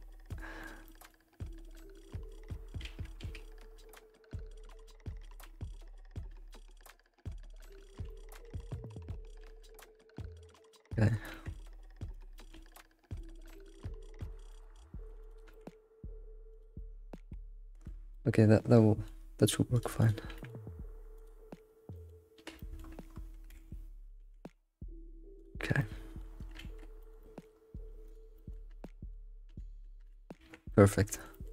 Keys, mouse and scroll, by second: 2.8 alt+shift+z, 3.2 alt+shift+z, 4.8-9.4 shift+middle drag, 9.4 alt+shift+z, 10.1 click, 10.4 middle click, 11.3 g, 12.4 shift+middle click, 12.7 scroll up 2, 13.2 click, 13.5 g, 14.5 middle click, 15.2 click, 15.5 g, 17.0 middle click, 17.9 scroll down 2, 18.1-19.7 middle drag, 19.7 click, 20.0 shift+click, 20.3 g, 21.6 scroll down 1, 21.9 alt+middle click, 22.6 middle click, 22.9-23.3 scroll up 6, 23.5 alt+x, 24.2 g, 25.6 scroll down 2, 25.8 middle click, 26.6 alt+x, 27.0 shift+middle click, 27.5 scroll up 2, 28.0 click, 28.4 shift+middle click, 28.6 scroll up 2, 28.8 middle click, 29.5 g, 30.4 ctrl+s, 30.5 scroll down 3, 30.7 middle click, 31.3 alt+middle click.